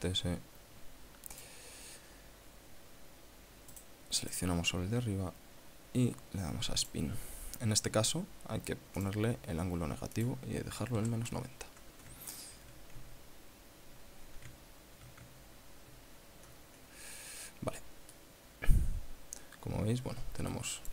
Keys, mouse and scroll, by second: 0.0 shift+s, 1.7 click, 4.1 right click, 4.6 right click, 7.2 click, 9.4 click, 10.5 click, 11.4 KP_Subtract, 11.7 KP_Enter, 12.7-13.0 shift+scroll down 2, 13.8-14.2 ctrl+scroll down 2, 15.0 shift+scroll down 2, 15.8-17.5 ctrl+scroll down 10, 17.6 scroll up 2, 18.5 click.